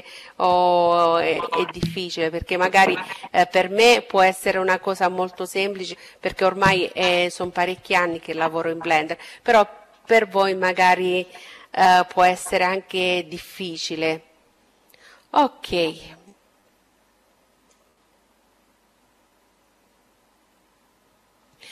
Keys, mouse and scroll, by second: 15.2-17.1 drag.